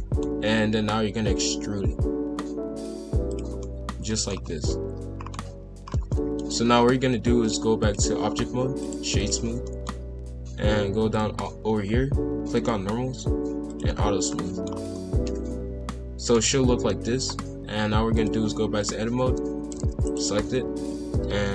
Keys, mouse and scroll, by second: 1.4 e, 3.6-4.3 middle drag, 4.3-4.7 scroll down 2, 4.7-5.8 middle drag, 5.8 scroll up 1, 6.1-7.4 middle drag, 7.4-8.8 drag, 8.8-9.6 right drag, 9.6-11.1 middle drag, 11.1 click, 12.5-13.8 drag, 14.3-14.6 middle drag, 14.6 scroll down 2, 14.9-16.4 middle drag, 16.4 KP_5, 16.5 KP_1, 16.9 KP_7, 18.1-19.2 drag, 19.2 a, 19.7 shift+d, 20.4 r.